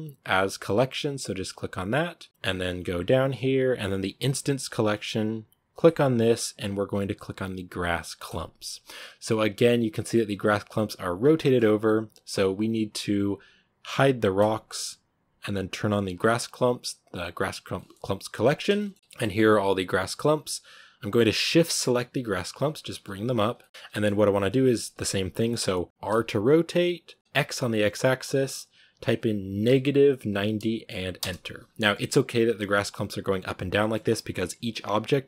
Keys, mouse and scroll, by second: 8.2-11.1 drag, 11.1-12.0 scroll down 5, 11.2-11.6 middle drag, 14.2-17.6 drag, 17.6-18.3 middle drag, 18.3 scroll up 1, 18.6-18.9 shift+middle drag, 18.9-20.1 right drag, 20.9 shift+right click, 23.3 g, 23.5 middle drag, 23.6 scroll down 1, 23.8-24.9 middle drag, 24.9 scroll up 2, 26.0 r, 31.5 scroll down 1, 31.7-35.2 middle drag.